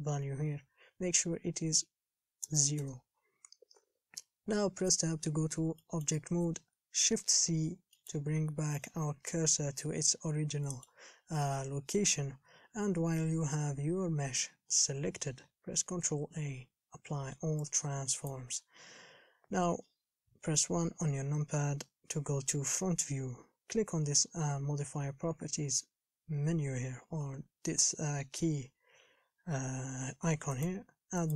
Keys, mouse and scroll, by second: 4.0 n, 5.1 Tab, 5.5 scroll down 4, 6.0 middle click, 6.6 scroll down 1, 7.7 shift+c, 8.2-18.5 shift+middle drag, 18.5 ctrl+a, 20.7 KP_1.